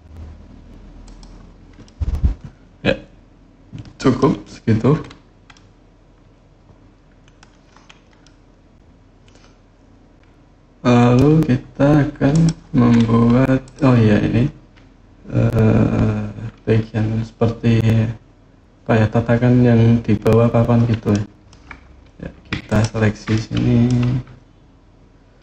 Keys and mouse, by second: 0.8 click, 1.6-4.0 middle drag, 5.4 middle click, 6.0 click, 6.4 middle click, 6.4 click, 8.1-10.9 drag, 12.1 click, 13.4 click, 20.9-21.3 middle drag, 22.4 ctrl+click, 23.1 middle click.